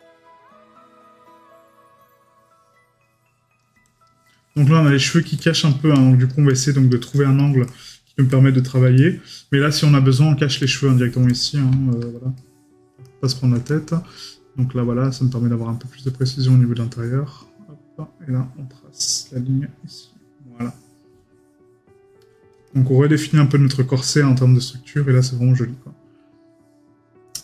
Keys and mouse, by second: 4.3 middle click, 7.6 middle click, 9.0 right click, 12.4 middle click.